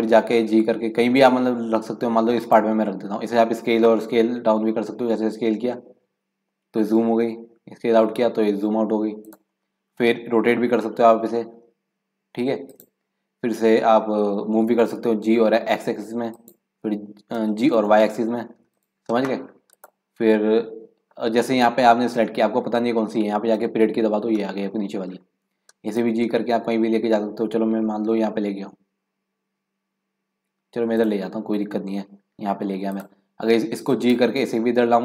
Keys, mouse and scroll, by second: 0.3 g, 5.1 s, 10.6 r, 15.0 g, 17.4 g, 19.8 click, 20.3-21.1 scroll down 5, 23.7 KP_Decimal, 24.6-25.9 middle drag, 25.9 g, 31.5 scroll down 2, 31.8-32.3 scroll up 1, 32.9 click, 34.2 g.